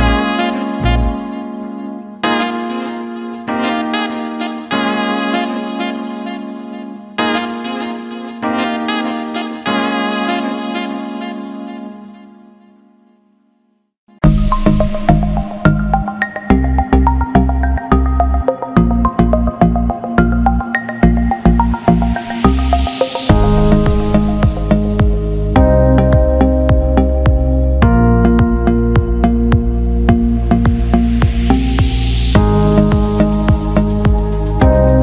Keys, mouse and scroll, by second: 0.9-1.7 drag, 2.1-3.7 drag, 5.8 alt+shift+middle click, 6.8 alt+shift+middle click, 7.7 click, 10.9-12.4 drag, 14.3-17.0 drag, 20.0-22.5 drag, 23.9-28.3 drag, 27.5 KP_2, 28.9-31.8 drag, 32.7-34.5 drag.